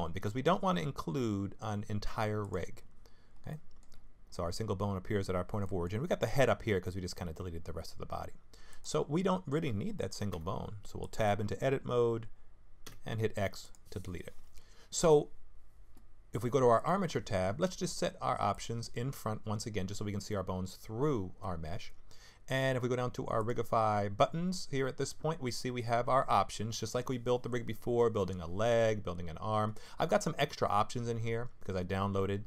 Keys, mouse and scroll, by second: 3.5 middle click, 3.9-4.9 scroll down 8, 4.9-5.6 scroll down 1, 5.6 middle click, 5.6-6.6 scroll down 2, 8.7 click, 10.3 Tab, 11.0 click, 12.8 x, 15.2-15.9 scroll up 1, 16.8 click, 18.5 click, 23.4 click, 24.5-26.4 scroll down 3, 26.4-27.8 scroll down 1.